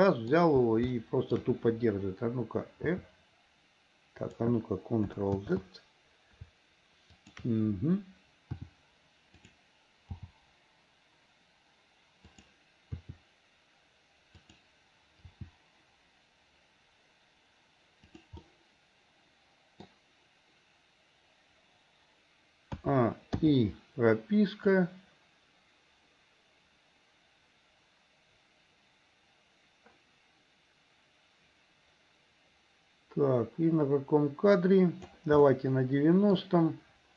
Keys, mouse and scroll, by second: 0.9 shift+middle click, 2.9 r, 5.5 ctrl+z, 7.1 shift+click, 8.5 r, 10.1 g, 13.0 r, 15.3 g, 18.5-20.1 middle drag, 23.4 a, 24.2 i, 25.5-35.2 drag, 35.5 middle click.